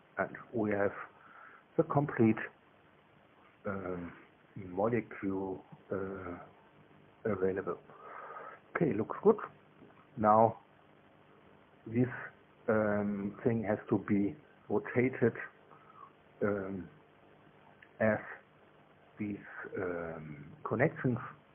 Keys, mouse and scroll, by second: 0.1 shift+space, 1.5-4.5 drag, 4.9 click, 8.0-9.1 drag, 10.0 2, 10.7-11.7 middle drag, 20.2 scroll up 1.